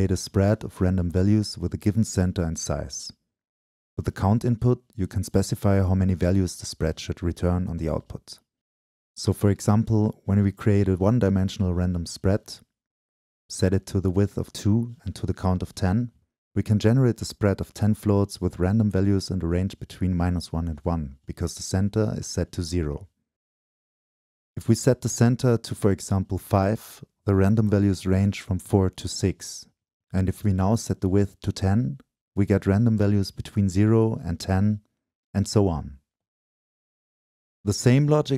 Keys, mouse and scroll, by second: 2.6 click, 4.4 middle click, 4.9 click, 5.5 BackSpace, 6.9-9.7 drag, 10.1 click, 10.3 Right, 13.2-13.7 drag, 13.7-14.6 middle drag, 14.6-15.2 drag, 15.2 middle click, 15.6-27.5 drag, 27.7-35.4 drag, 35.9-38.2 drag.